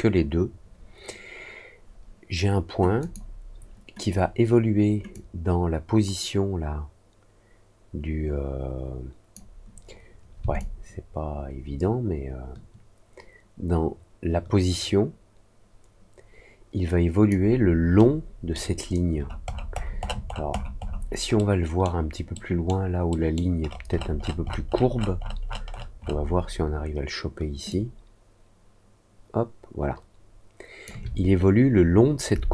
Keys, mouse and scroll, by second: 2.9 click, 5.1-9.3 drag, 10.5-17.2 alt+drag, 17.9 alt+middle click, 19.1-20.4 alt+scroll up 5, 20.4-20.9 alt+scroll down 2, 21.3 alt+middle click, 22.3 alt+middle click, 23.0 alt+middle click, 23.6-24.3 alt+scroll up 3, 24.4 alt+scroll down 1, 24.9 alt+scroll up 1, 25.6-26.1 alt+scroll up 2, 27.6-30.8 alt+drag.